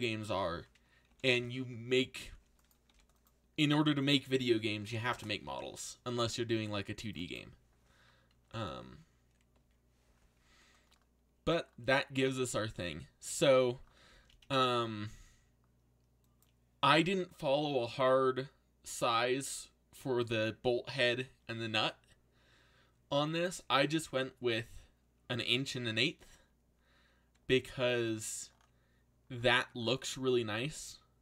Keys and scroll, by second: 1.1 ctrl+l, 2.1 shift+d, 2.8 r, 4.4-6.2 typing, 8.5 ctrl+l, 27.5 ctrl+z.